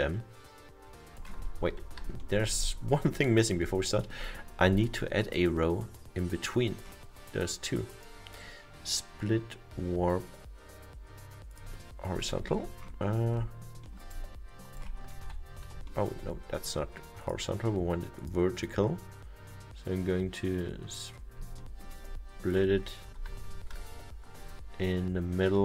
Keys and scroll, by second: 1.6 ctrl+z.